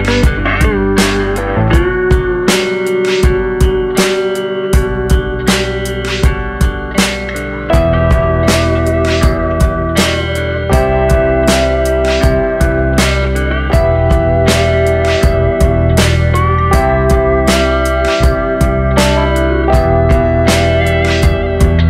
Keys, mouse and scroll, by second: 1.0 g, 2.9 scroll up 2, 3.1 scroll down 3, 3.2 middle click, 3.7 scroll down 2, 3.9 middle click, 4.1-4.7 scroll up 4, 4.8 KP_7, 5.6 g, 6.3 middle click, 8.0 click, 8.4 click, 8.7 click, 9.4 click, 9.9 click, 10.8 r, 12.6 scroll down 2, 12.8 middle click, 13.7-14.2 scroll up 4, 14.5 shift+middle click, 14.9 click, 15.3 click, 15.8 scroll down 3, 16.0 middle click, 16.5 g, 17.4 scroll down 2, 17.6 middle click, 18.2-18.7 scroll up 2, 18.8 ctrl+z, 18.8 scroll up 1, 19.2 middle click, 19.6 middle click, 20.9-21.4 scroll down 4, 21.4 middle click.